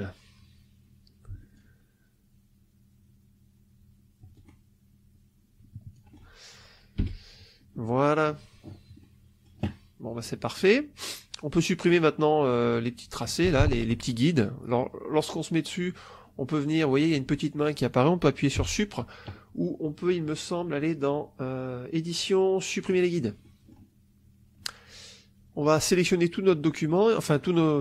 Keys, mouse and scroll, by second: 1.5-4.4 alt+drag, 4.4-4.9 alt+scroll down 1, 6.9 Delete, 7.7 click, 8.9 click, 10.1 click, 18.5 Delete, 19.9 click, 22.7 click, 23.3 middle click, 25.8-27.4 drag.